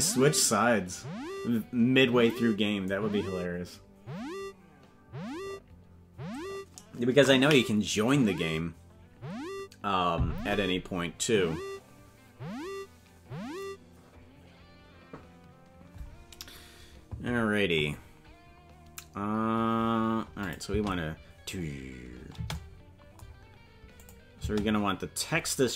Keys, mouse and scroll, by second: 20.4 click, 20.6 space, 23.9 click, 24.3 space.